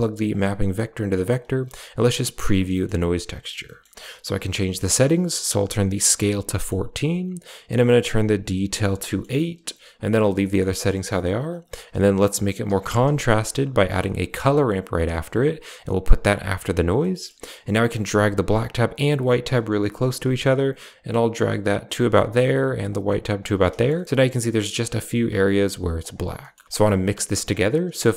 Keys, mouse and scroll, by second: 0.2-1.2 drag, 2.2 ctrl+shift+click, 2.6 middle click, 5.0-6.1 drag, 6.5 middle click, 7.8 click, 8.9 middle drag, 10.3 middle click, 10.9 middle click, 11.6 shift+a, 16.5 click, 17.0 middle click, 17.8-18.2 drag, 18.6-19.1 drag, 19.4 click, 19.9 click, 20.4 click, 21.6 click, 22.8 click, 23.6 shift+middle drag, 25.9 click, 26.3 middle click, 26.6 click.